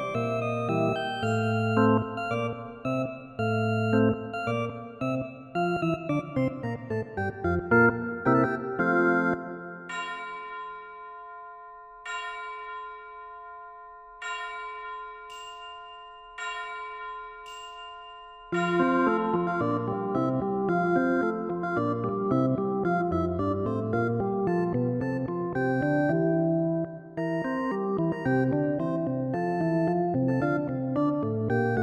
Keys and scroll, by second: 16.5 ctrl+i.